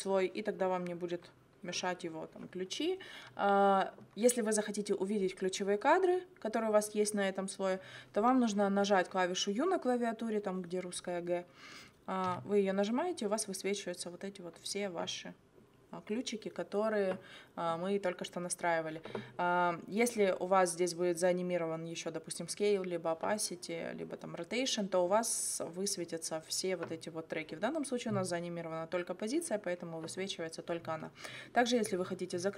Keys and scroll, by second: 12.3 u.